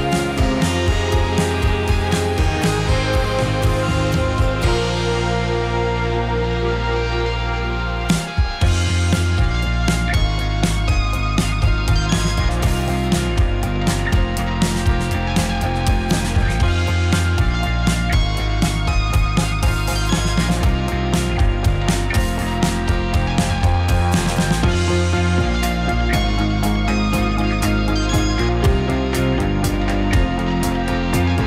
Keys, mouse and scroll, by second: 2.9 shift+r, 3.3 shift+r, 3.5 shift+r, 3.8 shift+r, 4.3-5.9 middle drag, 5.9 drag, 6.2-7.0 middle drag, 7.0 r, 7.5 click, 7.6-13.5 middle drag, 13.6 click, 14.2 `, 15.6 r, 16.6-17.6 middle drag, 17.6 r, 18.4-18.9 middle drag, 18.9 click, 19.1 r, 19.7 middle click, 20.1 click, 20.5 click, 20.7 r, 21.4-21.9 middle drag, 21.9 drag, 22.1 r, 22.6-23.0 middle drag, 23.0 click, 23.2 r, 23.6 click, 23.8-24.2 middle drag, 24.2 drag, 24.5 r, 25.1 click, 25.2-25.7 middle drag, 25.7 click, 25.8-26.1 middle drag, 26.1 r, 26.5 click, 26.7-28.1 middle drag, 28.1 click, 28.7 `, 29.8 r, 30.5-31.4 middle drag.